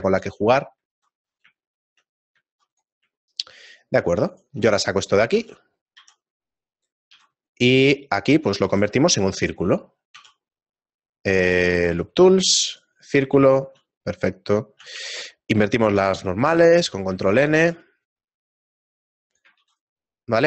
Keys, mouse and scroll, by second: 0.2 shift+middle click, 0.9 middle click, 1.0 ctrl+r, 1.7 shift+middle click, 2.6 ctrl+r, 2.6 middle click, 3.2 shift+middle click, 3.8 middle click, 5.3 alt+right click, 5.3 middle click, 6.0 e, 7.4 s, 9.1 middle click, 9.8-10.2 scroll up 3, 10.2 w, 13.5 shift+middle click, 14.3 middle click, 14.3-14.8 scroll down 3, 14.8 scroll down 1, 14.8 a, 15.4 a, 16.0 ctrl+n, 17.6 ctrl+r.